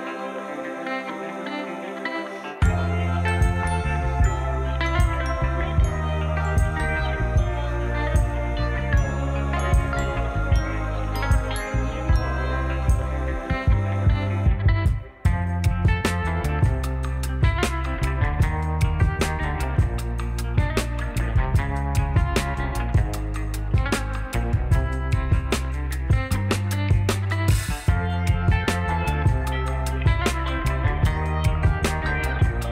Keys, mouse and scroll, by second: 0.4 Tab, 1.9 ctrl+r, 3.4-5.0 drag, 5.0 right click, 5.8-12.8 middle drag, 11.6 ctrl+r, 12.8-13.9 right drag, 13.9-23.2 middle drag, 21.3 ctrl+r, 23.2-24.4 right drag, 24.4 Tab, 25.6-26.7 right drag, 26.7-27.5 drag, 27.5-29.6 right drag, 29.6-31.9 middle drag.